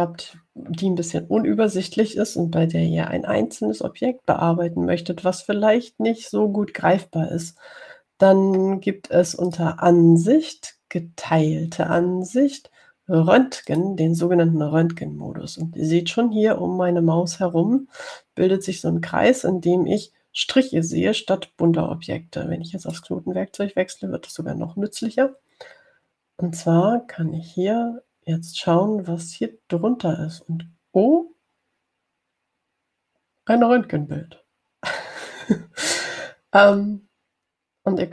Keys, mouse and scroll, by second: 10.7 click, 14.9 click, 24.1 click.